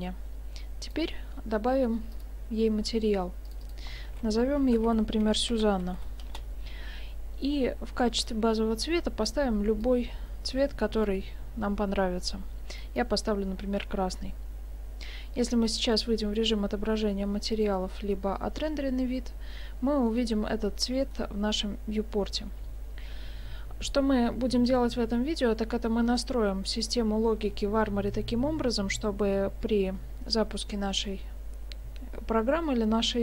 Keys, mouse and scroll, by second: 0.9 click, 2.1 click, 3.7 click, 5.9 n, 8.3 click, 16.5 click, 17.6 click.